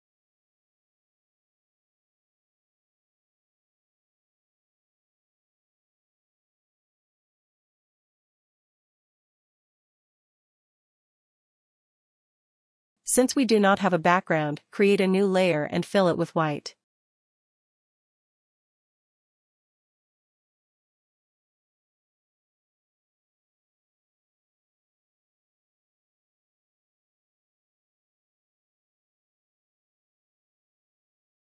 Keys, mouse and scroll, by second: 2.4 ctrl+click, 9.2 click, 10.8 click, 14.4 click, 16.2 click, 24.0 click, 24.0 click, 26.3 click, 30.3 click.